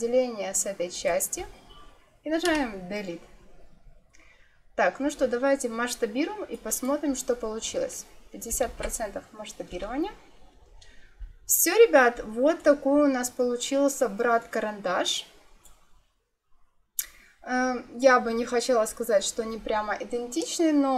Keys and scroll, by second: 2.3 Delete, 8.4 5, 8.5 0, 9.6 Return.